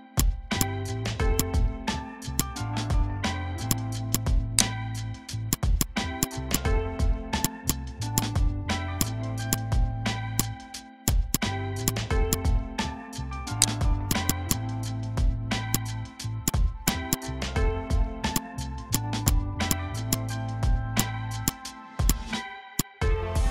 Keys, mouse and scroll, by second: 0.1 click, 3.6 click, 4.5 right click, 5.5 click, 7.6 space, 7.6 click, 7.8 space, 8.1-11.0 drag, 11.1 space, 11.3 click, 11.4 space, 11.8 click, 13.6 right click, 14.1 click, 15.3 ctrl+g, 15.7 shift+click, 17.9 g, 18.3 shift+click, 19.5 z, 19.6 click, 19.9 space, 20.1 click, 20.2 space, 20.7 v, 20.9-23.5 drag.